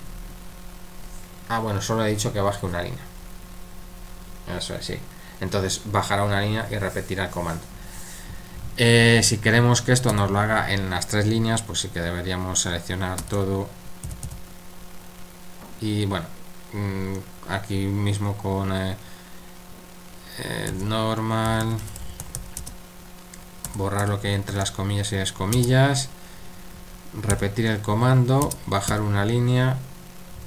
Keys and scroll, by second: 10.1 typing, 13.2-14.2 typing, 20.7-24.5 typing, 27.3 typing, 28.9 typing.